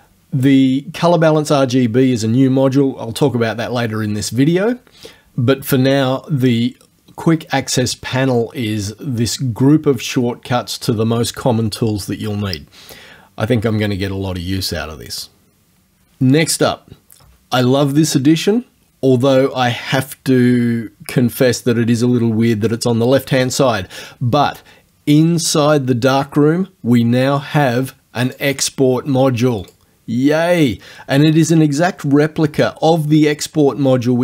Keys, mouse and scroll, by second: 28.3 click, 29.7 click.